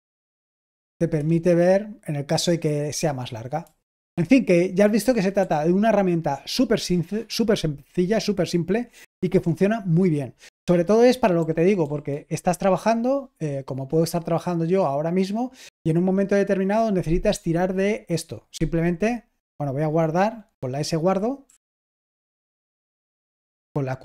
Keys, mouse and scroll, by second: 3.8-5.3 typing, 10.4 Tab, 11.1-12.5 typing, 23.9 q.